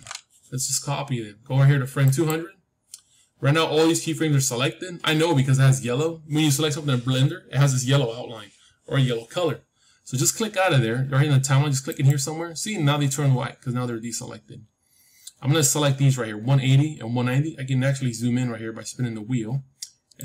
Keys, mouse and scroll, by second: 1.9-3.9 drag, 11.8-13.8 drag, 17.1-17.5 scroll down 1, 17.5-19.1 middle drag, 19.1-20.1 scroll up 1, 20.1-20.2 drag.